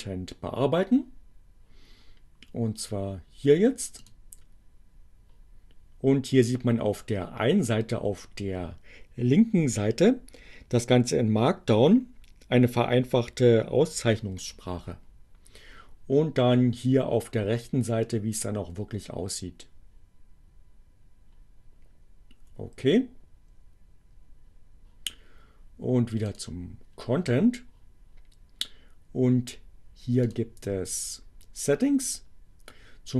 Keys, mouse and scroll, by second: 4.1 click, 26.2 click, 29.9 click.